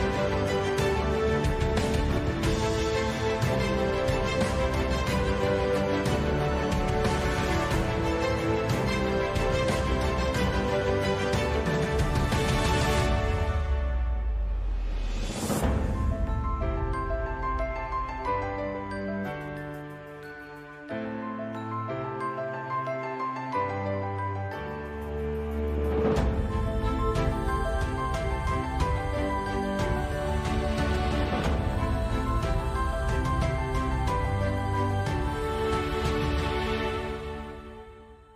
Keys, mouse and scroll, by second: 31.8-32.8 middle drag, 34.1 Tab, 34.8 a, 35.3 a, 35.7 u.